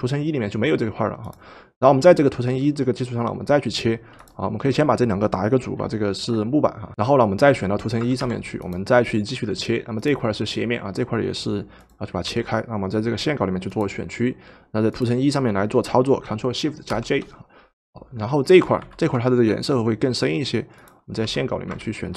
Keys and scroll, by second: 6.0 ctrl+g, 6.9 Return, 6.9-8.2 typing, 12.3 w, 18.9 ctrl+shift+v, 21.2 w.